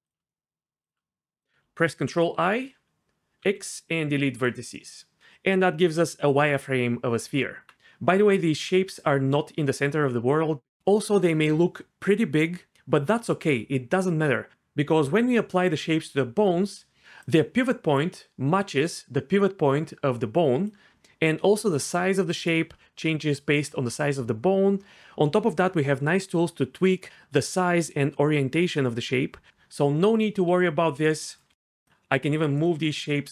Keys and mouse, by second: 2.0 ctrl+i, 3.4 x, 7.4 Tab, 7.7 g, 17.0-20.9 d, 18.8 click, 21.5-23.5 d, 22.3 click, 29.5-33.3 typing.